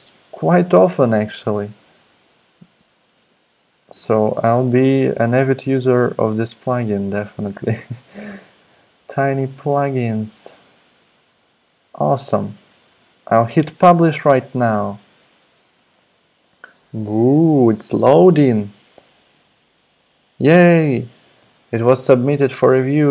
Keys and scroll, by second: 0.6-1.6 scroll up 1.